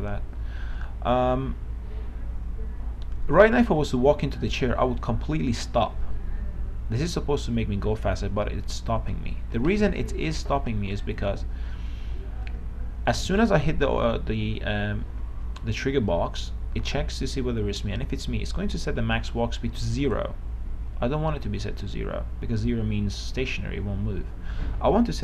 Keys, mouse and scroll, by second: 3.6-5.8 w, 7.8 w, 9.8 Escape, 11.4 click, 13.4 right click, 20.2-21.2 drag.